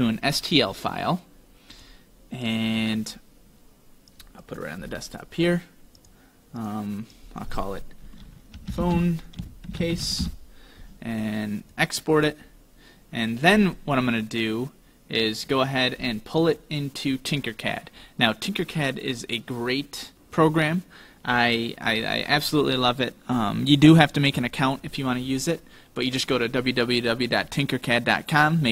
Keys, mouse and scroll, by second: 0.3 click, 12.3 click.